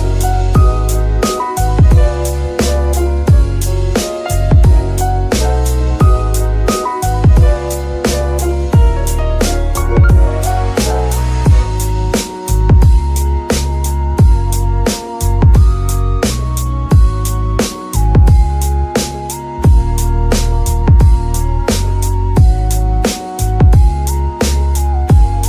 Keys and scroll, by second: 0.3 KP_3, 1.1 g, 10.4 g, 10.9 Escape, 11.8 g, 12.7 Escape, 23.0 ctrl+shift+s.